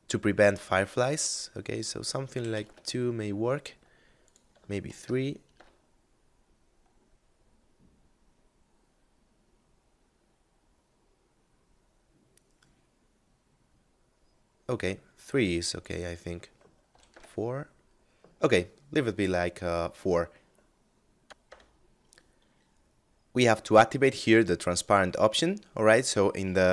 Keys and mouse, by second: 22.9 F9, 24.3 click.